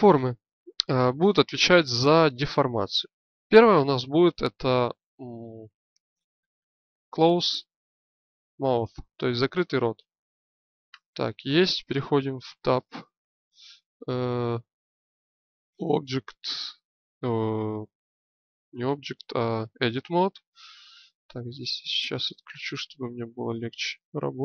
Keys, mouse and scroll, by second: 12.4 Tab.